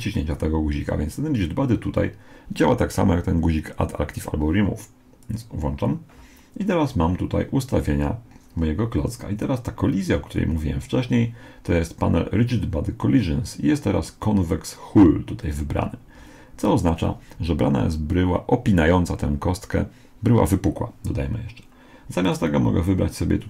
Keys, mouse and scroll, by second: 5.2-7.0 drag, 22.2-23.4 drag.